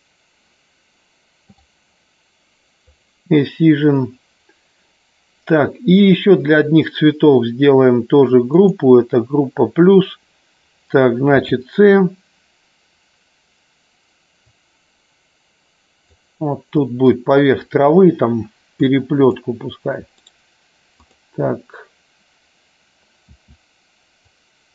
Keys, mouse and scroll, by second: 3.0 click, 8.4 click, 16.7 click, 18.8 click, 20.8 click.